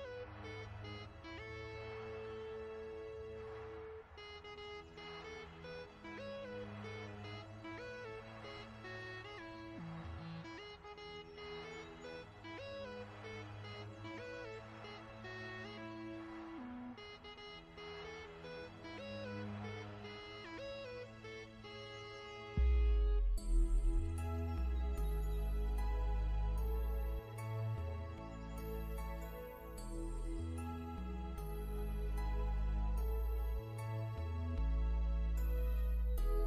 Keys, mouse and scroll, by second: 13.0 alt+shift+Num_Lock, 13.2 scroll down 1, 14.0-14.3 scroll down 1, 14.3 scroll up 1, 14.7 ctrl+scroll down 1, 15.7-16.5 alt+shift+scroll up 3, 16.5 click, 19.9 l, 20.8 shift+click, 21.7 click, 24.3 click, 25.8 click, 26.7 click, 27.8 click, 28.6 click, 29.9 click, 30.6 click, 32.0 click, 33.0 click, 35.4 click.